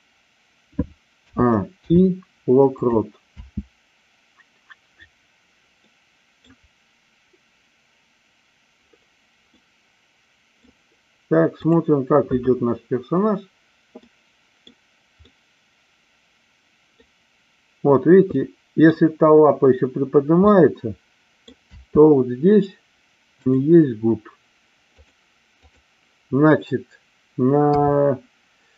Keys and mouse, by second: 1.2 a, 1.6 i, 3.2 space, 5.8-6.5 middle drag, 9.6-10.8 middle drag, 14.1-14.8 middle drag, 15.3-17.0 middle drag, 18.4 middle drag, 18.6 middle click, 20.5-21.5 middle drag, 21.6 space, 23.5 click, 25.0 click, 25.6 click, 27.7 KP_3.